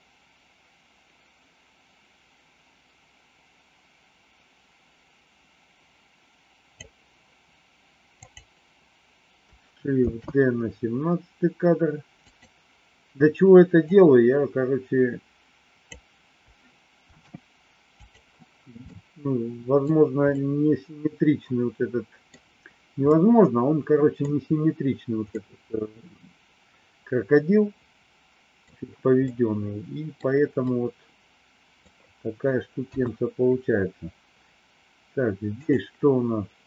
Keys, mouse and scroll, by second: 8.1 click, 9.9 shift+d, 13.9-15.8 drag, 17.0 shift+d, 18.8 middle click, 20.3-22.3 middle drag, 23.2-24.3 middle drag, 25.2-28.6 middle drag, 29.2 middle click, 30.6-31.8 middle drag, 32.8 KP_1, 35.4 click, 36.5 click.